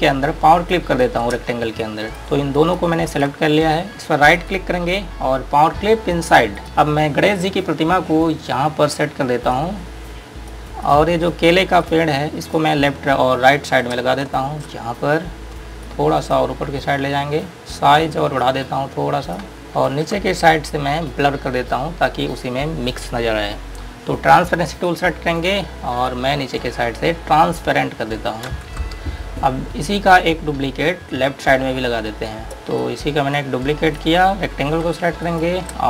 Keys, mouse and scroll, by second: 1.0 click, 2.1 click, 2.8 click, 4.7 right click, 6.7-7.5 scroll down 1, 9.8 click, 10.6-11.1 scroll down 1, 11.1 click, 13.2 scroll up 1, 14.5 Page_Up, 15.5-16.1 scroll up 1, 16.1 click, 17.6 click, 20.4 z, 20.8-21.8 scroll up 1, 21.8-22.7 scroll down 1, 22.7-24.9 scroll up 1, 25.1 click, 26.4 ctrl+click, 28.8 space, 29.3-30.5 scroll down 1, 30.5-32.1 scroll up 1, 32.5 click, 33.0 click, 33.6 right click, 34.7-35.1 scroll down 1, 35.4 click.